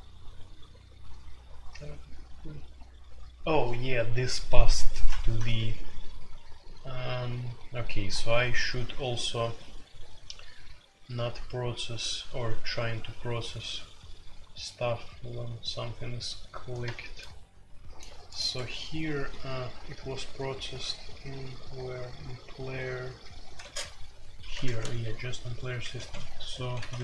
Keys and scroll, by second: 18.5 Escape, 23.6 space, 24.5 ctrl+g, 24.7 ctrl+g, 25.6-27.0 typing.